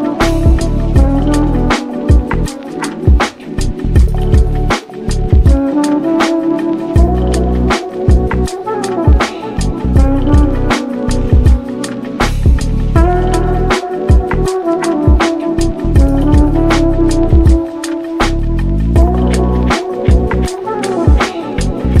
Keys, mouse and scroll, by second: 0.9 ctrl+s, 1.1 click, 1.8-3.1 drag, 3.4-3.8 scroll up 1, 3.8 shift+middle click, 4.1 scroll up 1, 4.4 ctrl+s, 4.8 click, 4.9-5.5 scroll up 1, 5.5 Tab, 5.7 Tab, 6.2 click, 6.7-7.4 drag, 7.4 Tab, 8.0 ctrl+r, 9.2-9.7 scroll up 1, 9.8 click, 10.5 scroll down 1, 10.7 Tab, 11.4 click, 11.8-14.5 drag, 14.9 click, 15.6 drag, 16.6 scroll down 1, 16.7 shift+middle click, 17.0 click, 17.5 click, 18.1-18.6 drag, 20.7 click, 21.2-22.0 scroll up 1.